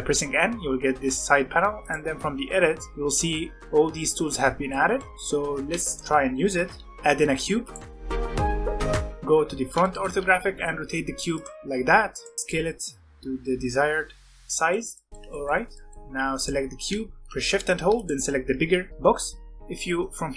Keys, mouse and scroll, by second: 1.8 click, 2.9-3.6 drag, 3.6-5.8 shift+middle drag, 5.8-6.8 shift+right drag, 6.8 shift+a, 8.1 s, 9.0 middle drag, 9.2 r, 9.8-10.1 shift+middle drag, 10.1 r, 11.6 g, 12.3 scroll up 1, 12.4-14.3 middle drag, 14.9-15.6 middle drag, 15.6 scroll down 1, 15.7 middle click, 15.9 alt+a, 16.3 click, 17.9 shift+click.